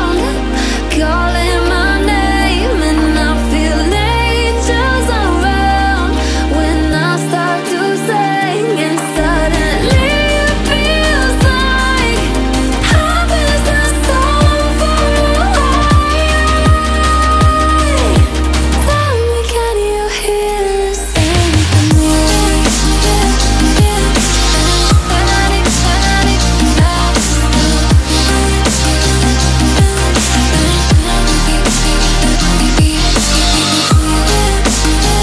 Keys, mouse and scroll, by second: 1.5 click, 5.8 click, 5.9 click, 6.9-7.6 alt+scroll down 2, 7.6-8.3 alt+scroll down 1, 8.3-8.9 alt+scroll up 2, 8.9-9.5 alt+scroll down 2, 9.5-10.0 alt+scroll up 2, 10.0 click, 12.6 F7, 13.4 alt+scroll up 1, 13.8-14.8 alt+scroll down 1, 14.8-15.2 alt+scroll up 1, 15.2-15.7 alt+scroll down 1, 15.7-16.2 alt+scroll up 1, 16.3-19.2 drag, 19.2 ctrl+z, 19.6-24.3 drag, 24.6-25.1 alt+scroll up 2, 25.3 alt+click, 27.9 click, 28.3-28.8 alt+scroll down 2, 28.8-29.8 alt+scroll up 2, 29.8-30.3 alt+scroll up 1, 30.8-32.0 alt+scroll down 2, 32.0 alt+scroll down 1, 32.2-32.8 alt+scroll up 1, 33.4 click.